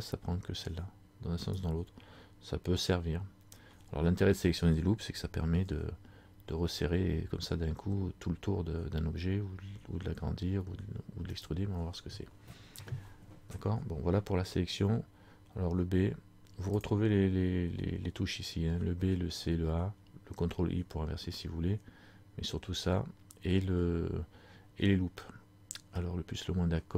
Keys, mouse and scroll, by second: 1.6 ctrl+alt+right click, 16.9 click.